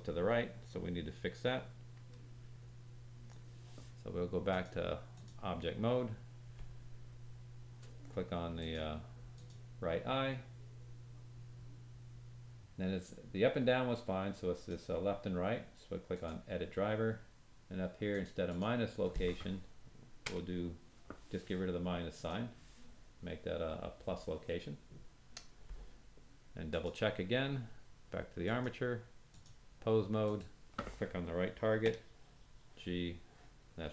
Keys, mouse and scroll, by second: 4.4-8.7 drag, 9.3 click, 14.5 right click, 26.6 click, 28.4-30.3 drag, 31.8 g.